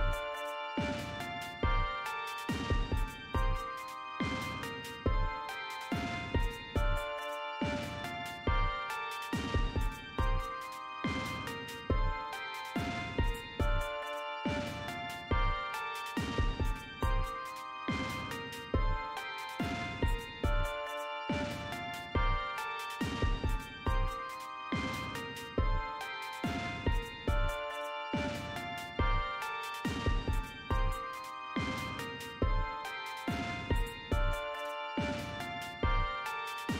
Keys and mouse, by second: 2.7 click, 4.8 click, 6.1 click, 7.1-11.0 typing, 16.8 click, 18.4 click, 26.2 click, 26.8-29.7 drag, 26.8 BackSpace, 28.6-31.7 typing, 34.7 click, 35.6 click.